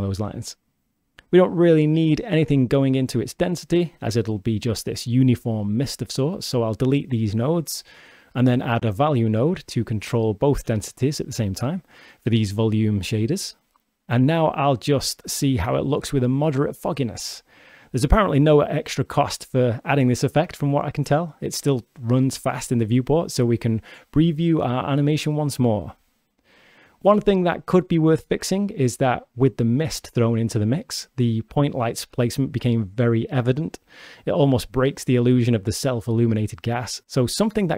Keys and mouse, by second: 0.1-1.0 drag, 1.6-2.3 drag, 3.9 click, 4.9-5.6 drag, 6.5 Delete, 6.9 click, 8.2 click, 10.6 click, 11.0 shift+a, 14.8-15.8 drag, 16.3-17.5 middle drag, 18.7-25.9 middle drag, 26.0-27.2 middle drag, 28.5 shift+space, 31.8 shift+space, 33.2 shift+space, 33.5 shift+click.